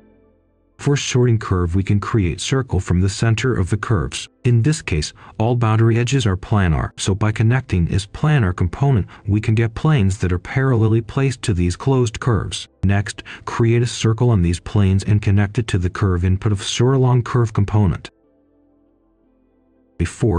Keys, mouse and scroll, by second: 1.0 scroll down 1, 1.2-1.6 scroll up 1, 1.6 click, 4.0-5.8 typing, 6.3-8.8 drag, 8.8 right click, 9.7-15.0 drag, 10.0-11.4 typing, 15.1 ctrl+right click, 16.3 ctrl+right click, 17.5 click, 19.7 Return.